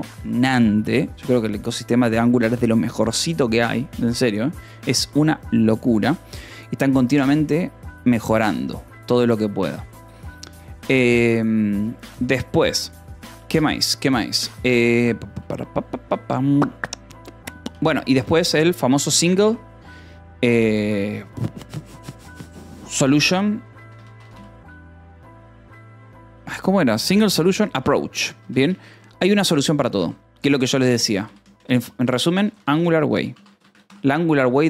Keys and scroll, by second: 17.6-19.8 typing, 22.7-24.4 typing, 27.5-33.8 typing, 29.8 ctrl+s, 34.3 ctrl+s.